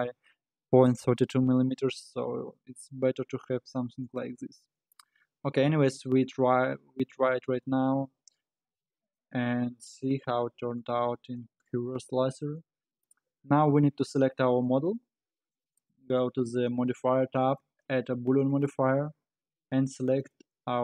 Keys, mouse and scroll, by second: 4.7-6.2 scroll up 10, 6.2 z, 7.6-10.7 middle drag, 10.8 click, 13.3 scroll up 1, 14.6-15.7 scroll down 5, 15.7 click, 17.4-20.3 drag.